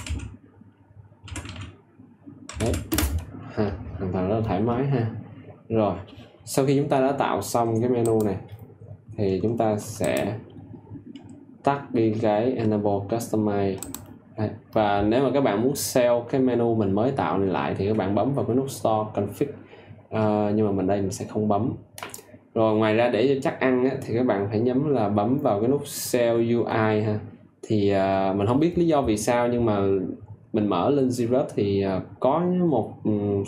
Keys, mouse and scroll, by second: 0.0-2.6 typing, 2.8 Return, 8.0 click.